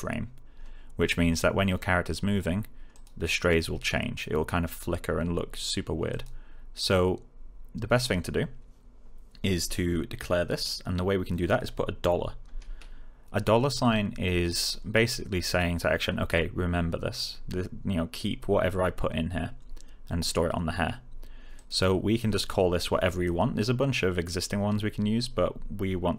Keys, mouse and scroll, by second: 2.8 click, 6.0 click, 21.5 click.